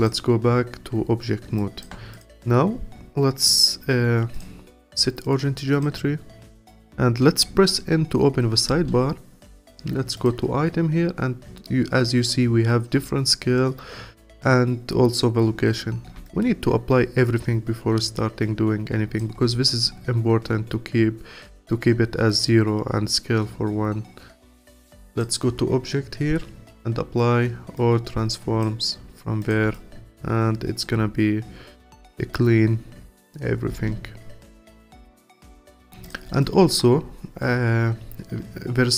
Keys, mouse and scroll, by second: 0.0 click, 1.6 alt+click, 4.3-7.4 drag, 8.7 n, 9.5 click, 15.8-16.2 scroll down 1, 16.2-19.3 alt+drag, 25.1-28.3 drag, 29.4 click, 29.7-32.8 alt+drag, 33.7 n, 34.7 click, 35.7-36.0 scroll down 2, 36.0 click, 36.4-38.9 alt+drag.